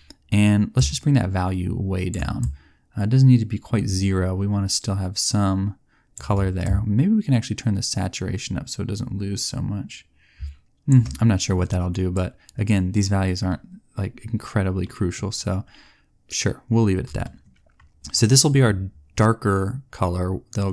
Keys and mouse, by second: 6.8-8.1 middle drag, 12.2-13.3 drag, 17.1-20.7 drag.